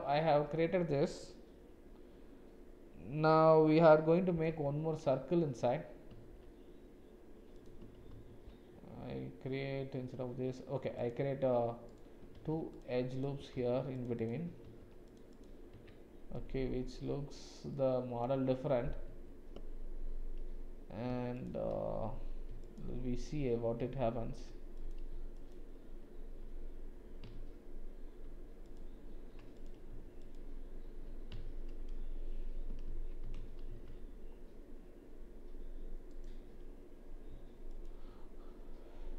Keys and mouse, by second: 4.1 middle click, 4.5 Tab, 7.6 click, 8.1 ctrl+r, 12.3 ctrl+r, 15.8 Tab, 16.4 click, 17.7 click, 19.1 Tab, 21.1 space, 24.7 click, 27.3 shift+z, 28.6 alt+shift+click, 29.5 click, 30.2 alt+click, 31.5 shift+z, 33.7 alt+shift+s, 37.7 alt+click.